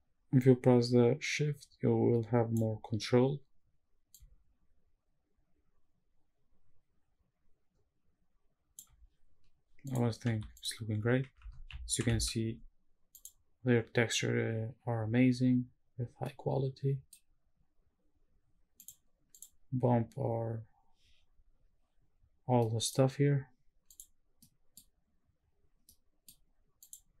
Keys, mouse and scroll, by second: 4.1-8.8 shift+drag, 9.8 click, 10.3 x, 11.0 scroll down 2, 16.3-17.1 middle drag, 18.8 click, 19.3 click, 21.9 scroll down 1, 25.0-27.2 scroll down 3.